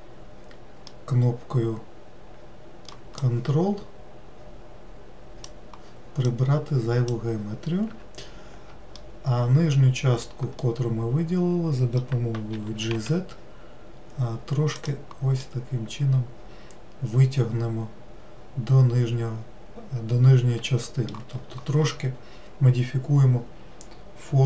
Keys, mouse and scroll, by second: 0.9-3.1 middle drag, 3.1 ctrl+click, 6.3 ctrl+click, 8.9 alt+middle click, 10.6-12.5 middle drag, 12.5 g, 15.4-18.4 middle drag.